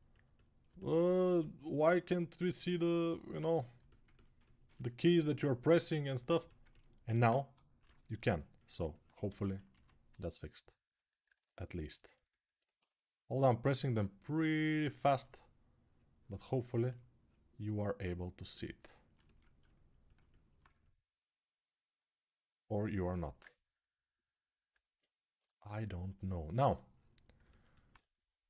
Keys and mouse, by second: 3.5 alt+right click, 4.2 right click, 4.8-12.6 right drag, 9.0 1, 9.5 1, 19.9-25.1 alt+drag, 25.1-28.4 ctrl+alt+right drag.